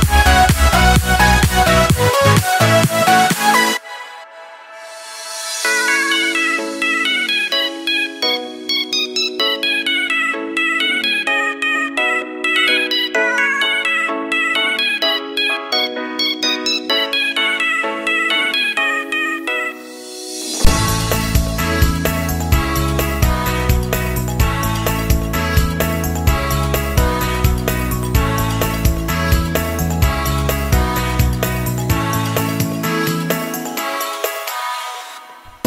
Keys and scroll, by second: 35.2 ctrl+g.